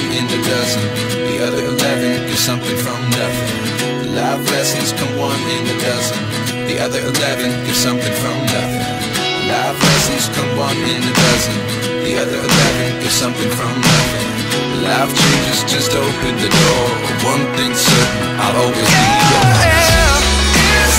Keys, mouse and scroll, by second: 3.2-4.4 typing, 10.8 typing, 15.1 double click.